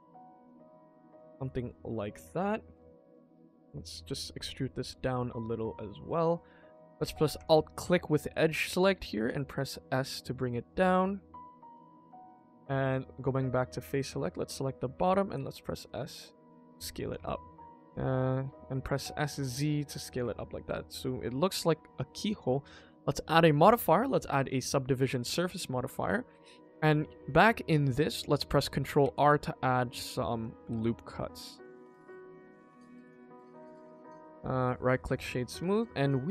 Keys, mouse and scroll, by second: 1.0 KP_1, 1.3 scroll up 2, 1.7 shift+middle click, 2.8 middle click, 3.4 click, 3.6 e, 4.1 KP_1, 4.7 shift+middle click, 6.0 click, 7.3 alt+click, 9.2 s, 12.8 click, 13.3 middle click, 13.9-14.4 scroll down 2, 14.4 click, 14.7 KP_1, 15.3 s, 17.1 Tab, 17.5 middle click, 19.0 s, 20.6 KP_1, 21.1 scroll down 1, 21.5 shift+middle click, 22.5-24.4 drag, 24.9 scroll up 2, 25.2 Tab, 26.3 click, 26.8 shift+middle click, 26.9 shift+middle click, 29.0 ctrl+r, 30.6 ctrl+r, 33.3 Tab, 34.0-34.3 middle drag, 34.4-34.7 scroll down 1, 34.7 right click, 35.5 scroll down 1, 35.6 KP_1, 36.0-36.3 scroll down 1.